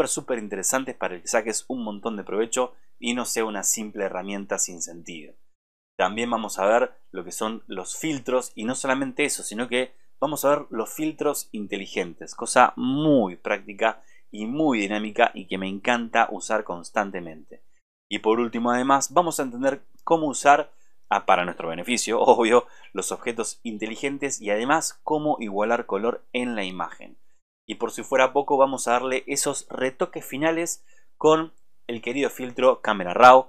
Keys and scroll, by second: 19.7 super+-.